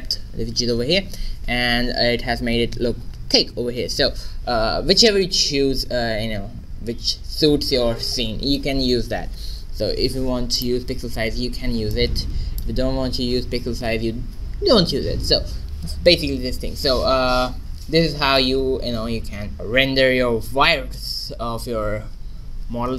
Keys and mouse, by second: 10.6-13.7 drag.